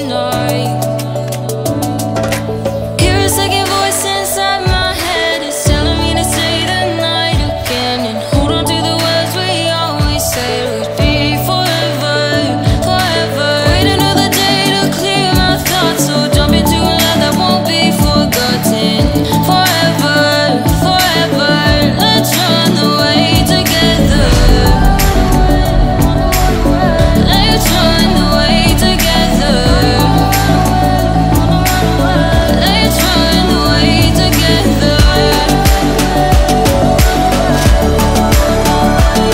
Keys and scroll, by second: 10.9 ctrl+z.